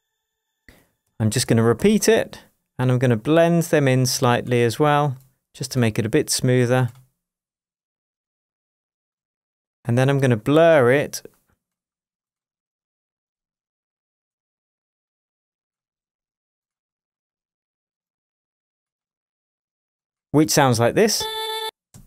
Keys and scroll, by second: 1.1 super+d, 21.1 space.